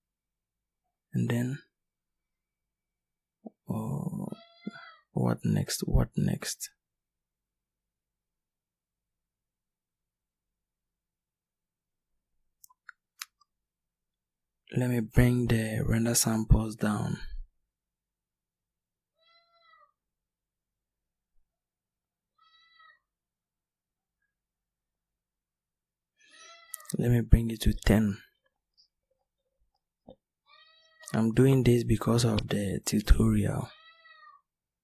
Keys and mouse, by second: 1.9-3.8 drag.